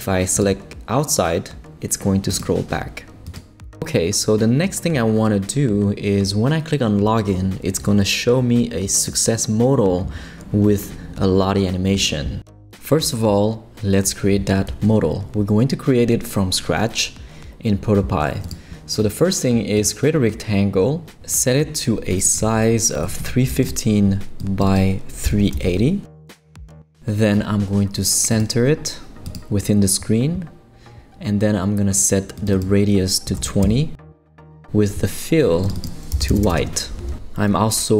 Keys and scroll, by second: 22.8-24.0 typing, 25.1-26.1 typing, 26.5 Return, 33.0-33.9 typing, 35.7-36.5 typing, 36.6 Return.